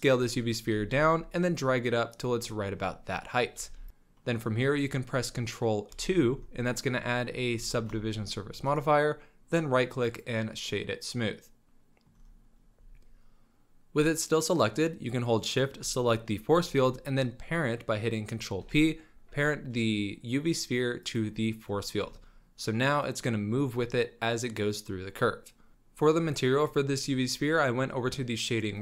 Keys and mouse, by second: 0.7 g, 2.6-3.4 drag, 3.6 g, 3.9 ctrl+a, 6.1 ctrl+2, 7.7 shift+drag, 8.0 middle drag, 10.5-11.5 middle drag, 11.5 drag, 11.6-12.1 middle drag, 15.5 shift+click, 18.6 ctrl+p, 21.6 c, 23.0-23.4 middle drag, 23.5 middle click, 24.8 middle drag.